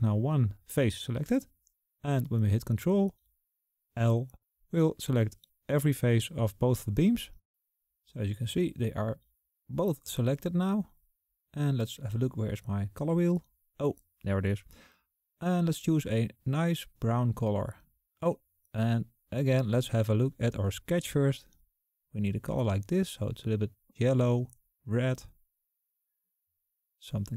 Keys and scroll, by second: 3.9 ctrl+l.